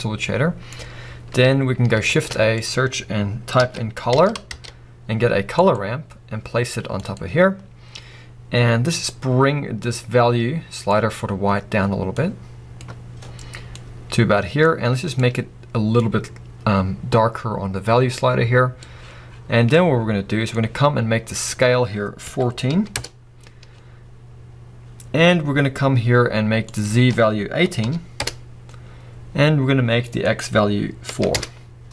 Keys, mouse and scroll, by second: 5.5 shift+a, 7.2 click, 23.0 Return, 28.2 click, 28.4 Return, 31.4 click, 31.6 Return.